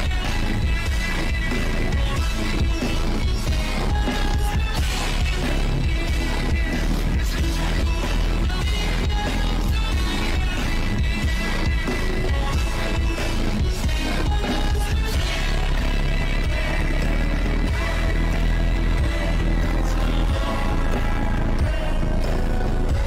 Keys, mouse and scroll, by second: 0.0 shift+`, 1.6 click, 1.9 click, 2.5 click, 2.9 shift+`, 3.9 shift+`, 4.6 click, 5.0 click, 5.1 shift+`, 6.2 click, 6.8 click, 7.8 shift+`, 9.6-10.6 drag, 10.6 shift+`, 11.5 ctrl+c, 11.6 ctrl+v, 11.7 click, 12.4 shift+`, 13.4 click, 14.4 click, 15.2 ctrl+z, 15.5 click, 16.0-17.2 drag, 17.6-19.0 drag, 19.0 shift+`, 20.9 shift+`, 21.6-22.8 drag.